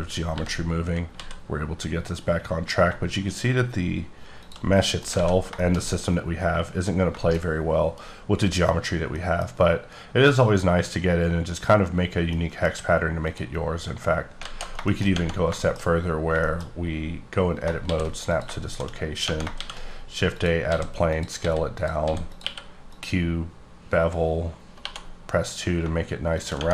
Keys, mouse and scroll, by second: 0.3 g, 1.1 z, 4.4 shift+click, 4.8 middle click, 5.0-5.5 scroll down 2, 5.1 alt+a, 5.5 shift+middle click, 5.8 scroll up 4, 6.8 scroll down 2, 7.2 shift+middle click, 7.4 shift+scroll up 2, 8.7-9.1 scroll down 1, 9.1 middle click, 10.3 scroll up 3, 11.9-12.3 scroll down 3, 12.3 middle click, 13.2 click, 14.4 alt+z, 14.8 shift+middle click, 15.1 scroll up 1, 15.5 middle click, 15.8-16.7 scroll up 12, 16.3 shift+middle click, 17.8 shift+s, 18.3 click, 18.6 shift+a, 19.5 shift+a, 20.3 click, 20.7 s, 21.1 click, 21.3 s, 21.7 click, 22.0 s, 22.3 click, 22.4 q, 22.8 click, 23.6 scroll up 1, 24.4-24.8 scroll up 2, 25.1 2, 26.3 shift+click, 26.6 Tab.